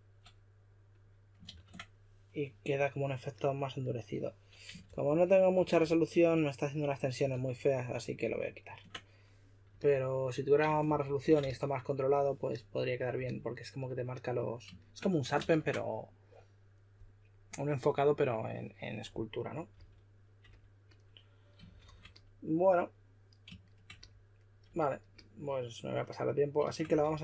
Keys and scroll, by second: 1.5 super+a, 4.8 shift+f, 5.5 shift+f, 5.8 s, 7.3 super+z, 7.8 super+z, 8.2 super+z, 10.8 shift+f, 11.4 s, 15.3 super+a, 19.7 s, 21.6 shift+d, 26.9-27.2 typing.